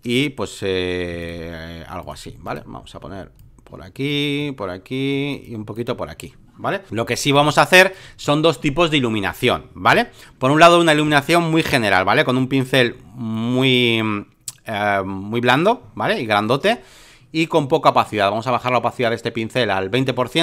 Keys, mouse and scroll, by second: 1.2 shift+click, 2.0 click, 2.4 shift+click, 3.3-5.6 drag, 5.7 shift+click, 6.9 alt+middle click, 7.3 space, 7.4 click, 11.0-12.3 right drag, 12.3-16.9 drag, 17.5-20.4 drag.